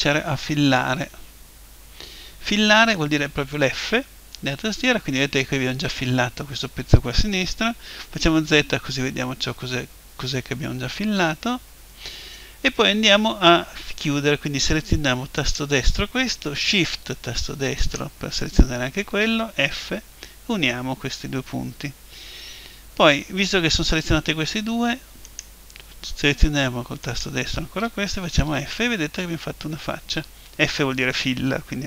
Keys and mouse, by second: 1.2-8.3 middle drag, 8.3 z, 15.4-17.4 right drag, 17.8-19.8 right drag, 19.8 f, 25.2-28.8 right drag, 28.4 f, 28.8-31.8 middle drag.